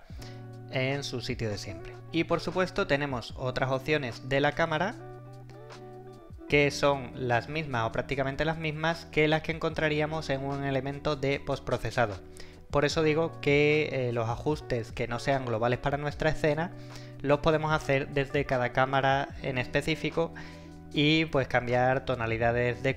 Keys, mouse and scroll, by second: 1.4-2.1 typing, 3.0-5.3 scroll down 1.